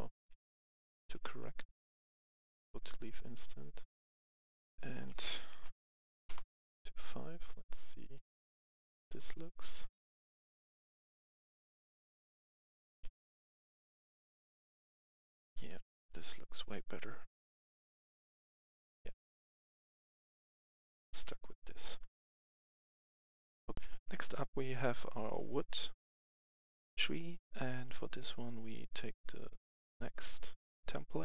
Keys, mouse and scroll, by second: 0.0-1.1 typing, 1.6 F11, 1.8 F10, 2.5 click, 5.5-6.0 typing, 6.2 Return, 7.1 Return, 7.9-9.1 drag, 10.3 right click, 10.7 w, 11.7-14.2 typing, 18.6-21.5 typing, 21.8 right click, 22.6 click, 23.7 F10, 28.1 click, 29.4 click, 30.7 right click.